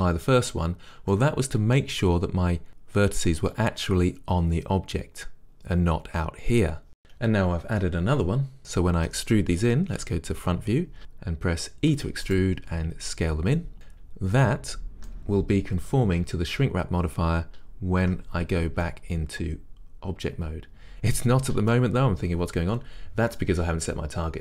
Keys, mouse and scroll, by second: 1.3-24.4 middle drag, 10.1 KP_1, 12.0 e, 12.5 right click, 12.8 s, 13.7 click, 18.1 Tab.